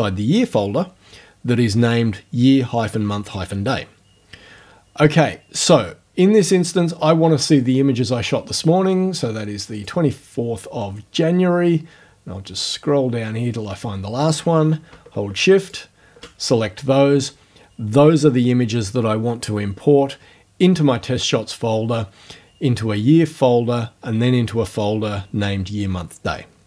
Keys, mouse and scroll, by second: 5.6 click, 7.5 click, 9.7 click, 11.6-12.5 scroll down 6, 15.7 shift+click.